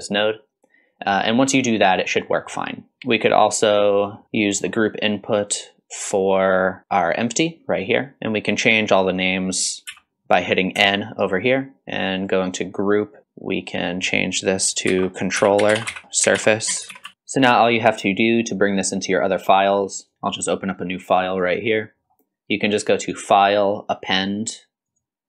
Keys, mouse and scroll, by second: 0.2-0.8 scroll up 1, 1.2 middle click, 1.5-1.9 middle drag, 2.3 middle click, 2.9 scroll down 1, 3.1 middle click, 3.9 middle click, 4.2 click, 4.3 middle click, 5.6-7.0 drag, 7.7 scroll up 1, 8.2 n, 9.9 n, 12.2-17.1 drag, 16.0 l, 17.1 ctrl+s, 23.0-25.0 drag, 23.0 scroll up 1.